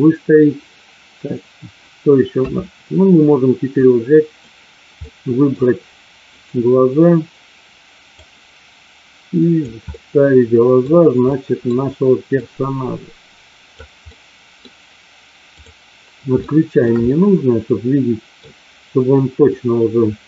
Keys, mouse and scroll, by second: 2.3 KP_3, 3.8-4.5 drag, 5.0-5.5 middle drag, 8.2-9.5 drag, 9.9 middle click, 11.3 middle click, 12.4-13.8 drag, 14.0 middle click, 15.4 click, 16.4-16.9 shift+middle drag, 17.0-18.4 middle drag, 19.5-20.2 drag.